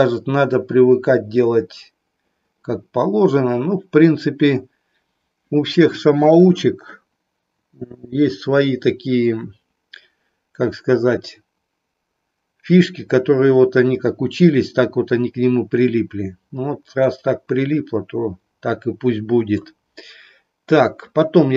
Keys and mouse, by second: 17.0-19.7 middle drag.